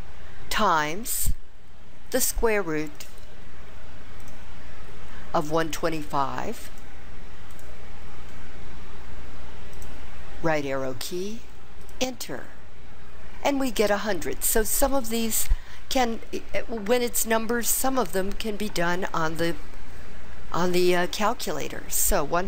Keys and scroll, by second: 1.0 *, 5.9 1, 6.6 2, 7.5 5, 9.7 ), 11.8 Return.